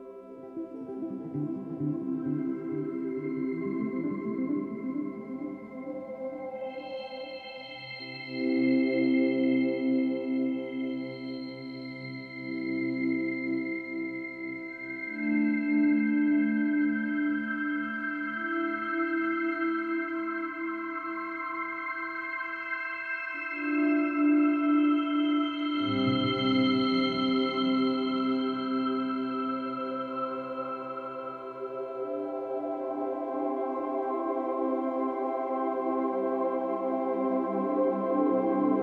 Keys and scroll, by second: 4.1 ctrl+d, 4.5 ctrl+alt+g, 11.8 ctrl+=, 12.3 space, 13.8 space, 16.1 space, 18.4 space, 19.0 ctrl+-, 19.4 space, 20.7 space, 22.6 ctrl+-, 22.6 ctrl+=, 23.1 space.